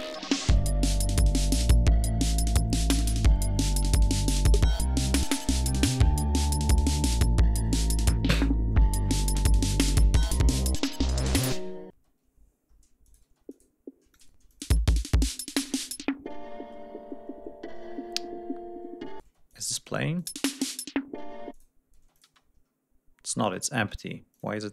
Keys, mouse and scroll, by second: 1.5 click, 2.5-3.1 ctrl+scroll down 5, 3.7 g, 4.0-4.3 scroll down 2, 4.4-4.8 scroll up 2, 5.0 scroll down 2, 5.4 ctrl+scroll up 2, 6.4 ctrl+scroll down 2, 6.8 ctrl+scroll up 2, 7.7 scroll up 2, 8.2 scroll up 2, 8.7-9.9 ctrl+scroll down 6, 10.2 scroll up 2, 10.8-11.1 scroll up 2, 11.3 scroll up 2, 11.8 space, 13.0 click, 13.2 space, 13.4 click, 14.0 click, 14.2 space, 14.4 click, 14.9-15.2 scroll down 1, 15.4-16.0 scroll up 2, 16.6-17.3 scroll down 3, 17.6-18.4 scroll down 4, 18.5 scroll up 2, 19.1 space, 19.4 click, 20.1 click, 20.2 space, 21.4 click, 21.9 space, 22.1 click, 23.0 ctrl+scroll down 2, 23.7 space, 24.2 click.